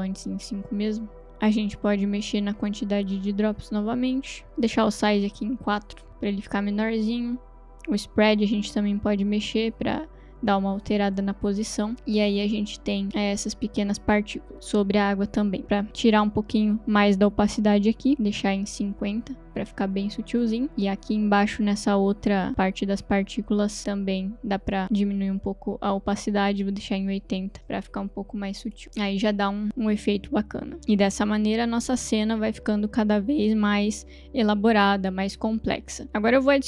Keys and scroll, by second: 0.0 Return, 5.6 4, 6.1 Return, 11.9 space, 15.6 space, 15.9 t, 18.6 0, 18.8 Return, 19.6 space, 20.7 space, 23.1 t, 26.6 0, 26.9 Return, 27.6 space, 36.0 space.